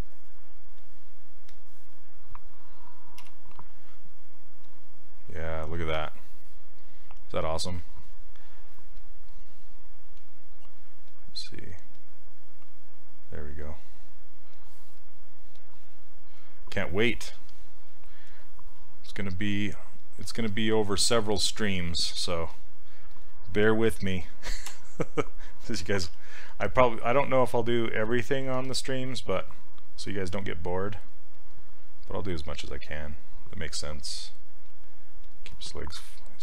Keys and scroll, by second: 3.2 ,, 24.7 z, 26.1 s, 28.6 s.